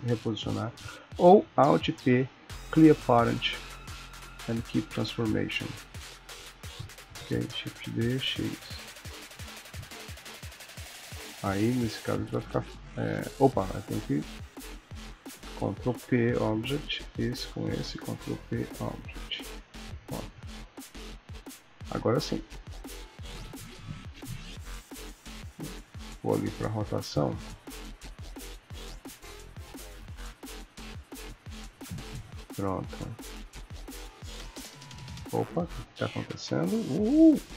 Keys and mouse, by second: 0.8 ctrl+z, 1.7 alt+p, 7.6 shift+d, 11.6 click, 12.1 r, 13.7 click, 15.1 shift+click, 15.5 ctrl+p, 17.0 click, 17.3 click, 18.1 ctrl+p, 19.8 click, 20.1 r, 21.8 click, 22.2 r, 23.0 click, 23.3 r, 24.3 click, 26.3 click, 27.3 click, 30.5 ctrl+middle click, 31.1 ctrl+s, 31.6 shift+middle click, 33.5 click, 34.0 r.